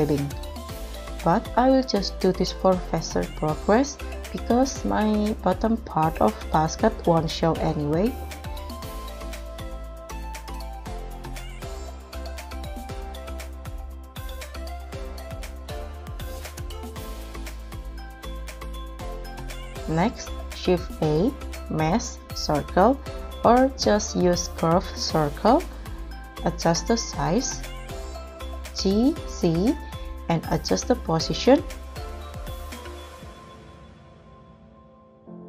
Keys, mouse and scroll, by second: 0.4 KP_7, 0.9 scroll up 4, 1.7 w, 1.9 g, 4.0 r, 4.3 z, 4.5 r, 7.9 g, 9.3 scroll down 6, 10.0 middle click, 12.2-13.9 typing, 12.4 scroll down 1, 12.7 scroll up 4, 13.1 Escape, 13.5 double click, 15.2 double click, 15.3 double click, 15.3 double click, 15.7 scroll down 3, 16.2 s, 16.4 z, 16.6 s, 17.1 scroll up 2, 17.5 scroll down 2, 17.7 double click, 17.8 scroll up 2, 17.9 r, 18.0 z, 18.5 g, 18.6 z, 18.9 double click, 18.9-19.5 scroll down 5, 19.1 middle click, 19.5-19.9 scroll up 1, 19.9 KP_7, 20.7 shift+a, 24.4 s, 27.5 KP_1, 28.8 g, 29.2 z, 32.3-32.6 scroll up 2, 34.7 KP_7.